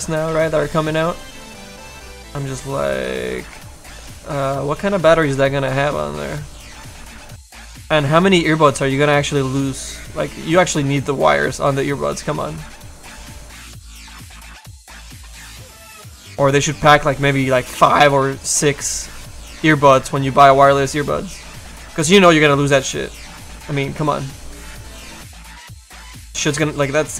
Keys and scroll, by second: 0.3 s, 0.8 s, 2.0 s, 7.3 s.